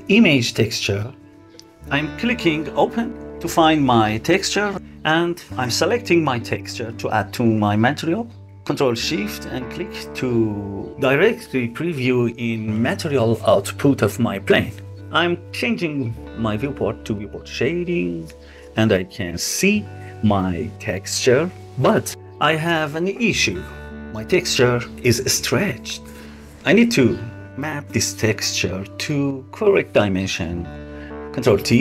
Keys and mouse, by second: 7.9 click, 8.8 ctrl+shift+click, 10.5 click, 10.9 click, 11.8 click, 16.2 click, 17.1-18.2 middle drag, 24.4 middle click, 28.6 click, 31.3 ctrl+t.